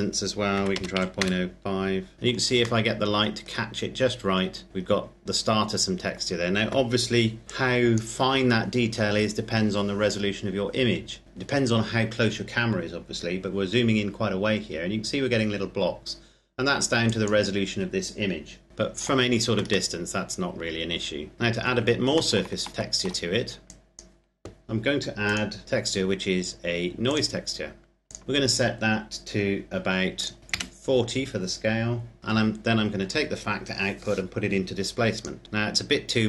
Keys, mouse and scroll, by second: 0.2 KP_Decimal, 0.4 KP_0, 0.7 KP_5, 1.1 KP_Enter, 2.1 middle click, 2.7 shift+middle click, 3.5-4.7 scroll up 1, 4.7-6.4 scroll down 1, 7.4 click, 11.2-12.1 scroll up 1, 16.8 click, 18.7 shift+middle click, 21.3 click, 22.1 shift+middle click, 23.4 click, 26.9 click, 28.2-29.5 scroll up 1, 29.9 click, 30.4 KP_Enter, 32.8 click.